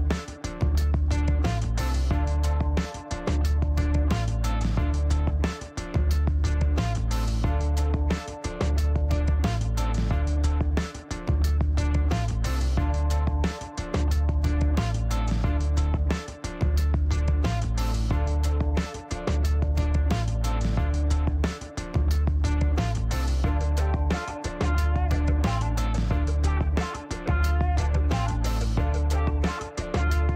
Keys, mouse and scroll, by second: 0.2 click, 1.4 click, 2.9 click, 3.8-5.3 typing, 6.3 click, 7.7 click, 8.8 middle click, 13.0-14.6 drag, 16.2 click, 17.2 click, 18.0 click, 19.3 click, 20.3 click, 20.8 right click, 21.5 middle click, 23.0 scroll up 1, 23.3 middle click, 27.7 click, 30.0 click.